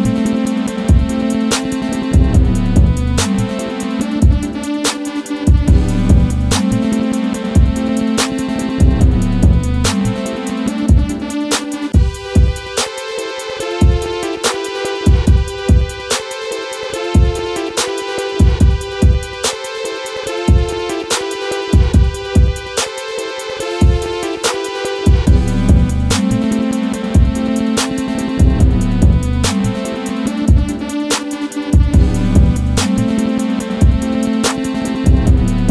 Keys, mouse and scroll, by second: 2.3 scroll up 1, 3.3 Down, 3.3 typing, 3.6 Left, 4.5 click, 5.5 scroll up 1, 7.1 click, 7.7-8.3 scroll up 1, 7.7 typing, 8.3 click, 12.7 F12, 14.3 click, 17.5 scroll down 1, 18.2-19.4 drag, 19.4 ctrl+right click, 21.3-23.2 drag, 23.2-25.0 drag, 27.4 right click, 27.9 click, 28.3 scroll down 1, 28.9 scroll up 1, 29.3 click, 30.9 F12, 31.8 click.